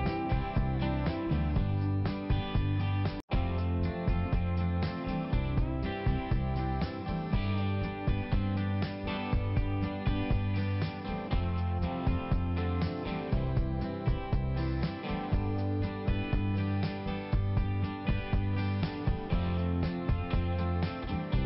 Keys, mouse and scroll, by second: 1.5 click, 1.6 click, 2.6 click, 4.1 click, 6.3 click, 6.4 click, 9.0 click, 9.3 click, 9.8 click, 11.0 click, 11.1 click, 12.6 click, 15.7 click, 15.8 click, 15.8 click, 18.8 click, 19.8 click, 20.3 click, 20.8 click, 21.4 click.